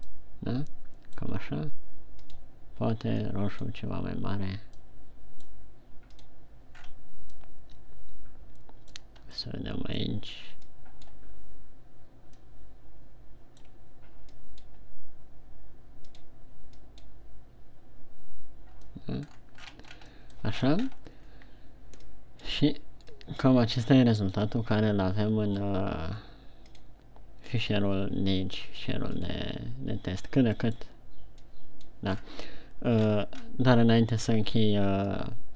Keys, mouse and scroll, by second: 30.1 scroll down 4.